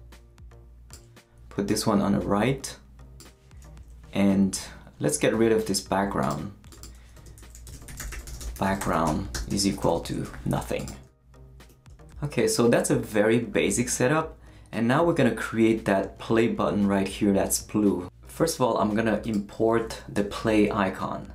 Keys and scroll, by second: 7.1-9.8 typing.